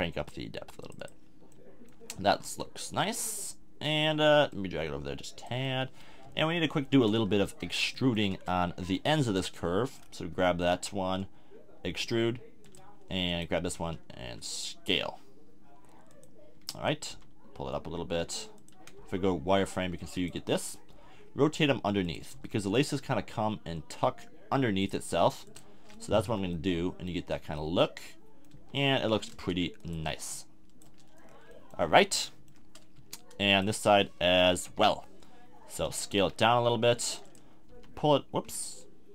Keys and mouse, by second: 2.2 a, 2.4 Tab, 3.3 middle click, 5.7-6.2 drag, 6.2 KP_1, 7.2-8.5 middle drag, 8.5 Tab, 9.4-11.6 middle drag, 11.9 e, 13.8 s, 17.1 g, 19.0 z, 20.9 r, 22.3 g, 25.1 r, 25.8 a, 25.9 Tab, 26.2 z, 26.5-27.6 middle drag, 28.5 z, 29.3 Tab, 30.3 middle click, 30.9 Tab, 31.2 middle click, 31.8 click, 31.8 a, 32.3 middle click, 33.0 Tab, 33.5-35.7 middle drag, 34.3 KP_3, 34.6 KP_1, 36.2 s, 37.3 click, 37.7 h.